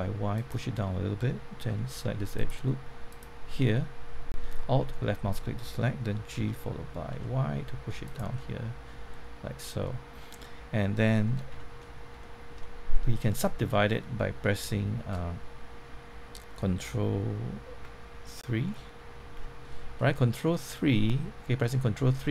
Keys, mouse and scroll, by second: 0.3 click, 2.3 alt+click, 3.7-4.7 middle drag, 6.3-7.1 typing, 8.0 click, 8.3-11.5 middle drag, 11.5 Tab, 11.8 middle click, 12.1 shift+middle click, 13.4 scroll up 1, 13.7 middle click, 14.6-15.7 shift+middle drag, 19.1 ctrl+3, 19.7 middle click, 20.6 scroll up 1, 20.9 middle click.